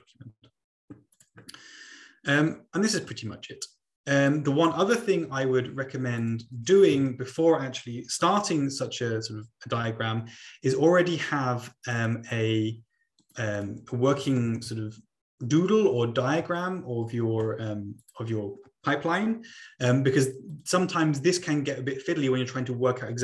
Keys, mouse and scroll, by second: 1.2 click, 1.5-2.1 scroll up 1, 3.2-4.5 drag, 5.4 Delete, 7.2 ctrl+click, 7.3 ctrl+t, 7.4 typing, 7.5 Return, 12.2 click, 13.3-14.5 drag, 14.1-14.8 typing, 18.0 click, 20.6 ctrl+click, 20.9-21.7 ctrl+scroll up 2, 21.7-22.3 ctrl+scroll up 1, 22.3 ctrl+scroll up 1.